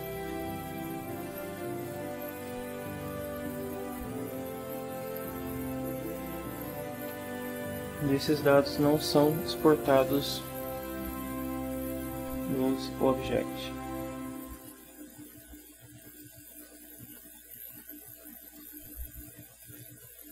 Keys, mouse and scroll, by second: 0.7 ctrl+middle click, 2.4 click, 3.5 click, 5.1 click, 6.1 click, 7.1 ctrl+Down, 8.3 Tab, 9.9 click, 12.6 click, 14.4 click, 16.2 click, 17.5-18.8 drag.